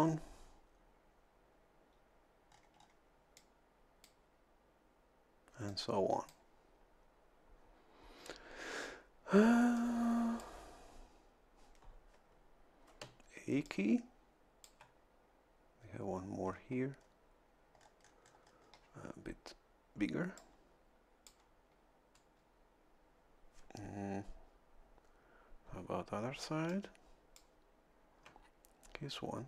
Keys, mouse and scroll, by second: 2.5 scroll down 1, 3.3 click, 5.7 click, 9.7 click, 13.0 a, 13.6-14.8 drag, 16.5-17.2 scroll up 4, 17.8-18.9 scroll up 2, 20.4-21.4 drag, 26.5 a, 26.7-27.8 drag.